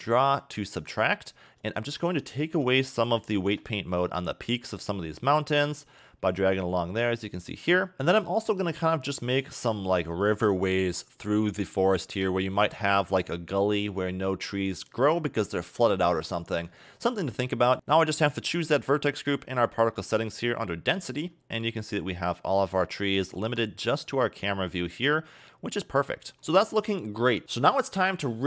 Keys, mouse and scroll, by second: 1.4-1.7 scroll up 2, 1.7 shift+middle click, 2.5 f, 3.3 shift+middle click, 4.1-5.3 scroll up 2, 5.3 click, 7.9 scroll up 2, 8.1 shift+middle click, 8.6 scroll up 2, 12.5 click, 17.7 scroll down 10, 18.4 click, 19.1-19.4 scroll down 6, 20.1 click, 23.3 a, 23.5 a, 24.9-26.4 scroll up 2, 26.4 scroll up 1, 27.4 click.